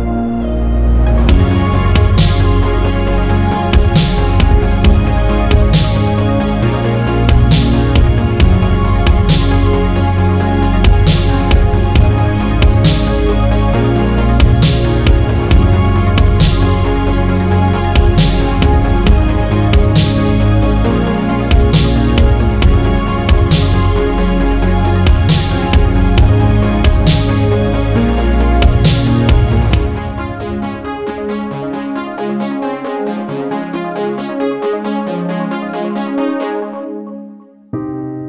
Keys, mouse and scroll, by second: 1.0 ctrl+z, 3.3 click, 4.0 middle click, 4.0 alt+scroll up 1, 4.2 middle click, 4.5 middle click, 5.0 middle click, 5.0 alt+scroll up 1, 5.5 alt+click, 6.0 alt+click, 6.3 alt+click, 7.4 alt+shift+click, 8.4-8.7 scroll down 2, 9.7 shift+right click, 11.0-13.6 ctrl+drag, 15.2-19.2 ctrl+drag, 19.8 ctrl+click, 20.9-21.9 scroll up 5, 22.2 alt+click, 22.6 alt+click, 23.3-23.8 scroll down 8, 23.8 shift+right click, 25.0-25.3 scroll up 7, 25.8 alt+middle click, 26.2 scroll down 1, 26.5 alt+middle click, 26.9 scroll down 2, 27.2 alt+middle click, 28.2 scroll down 1, 28.6 scroll up 2, 29.3 click, 29.9-30.4 scroll up 2, 30.4 scroll down 2, 31.4 click, 32.3 click, 33.0 click, 33.4 click, 33.7 click, 34.7 scroll down 2, 35.3 click, 36.0-36.4 scroll down 2, 37.1 click.